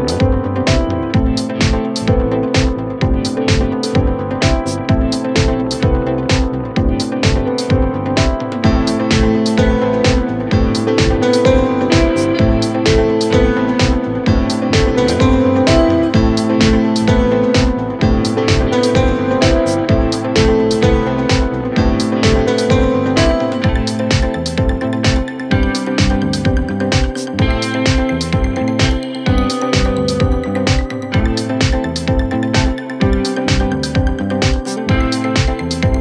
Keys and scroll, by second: 18.9 KP_Add.